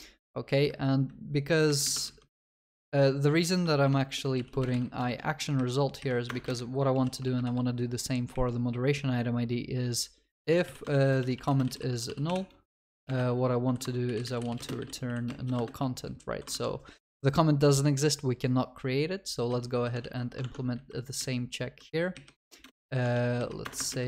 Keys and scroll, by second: 3.7 ctrl+w, 10.9 Return, 12.3 Return, 13.5 Delete, 20.5 ctrl+Tab.